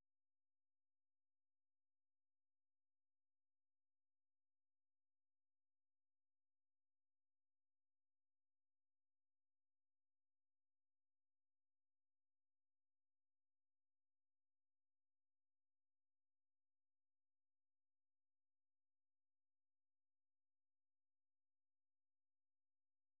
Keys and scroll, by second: 2.0 Up, 2.2 Up, 2.4 Up, 2.6 Up, 3.5 Up, 4.2 Return, 11.4 alt+Tab, 12.3 alt+Tab, 13.3 super+2, 14.5-17.8 typing.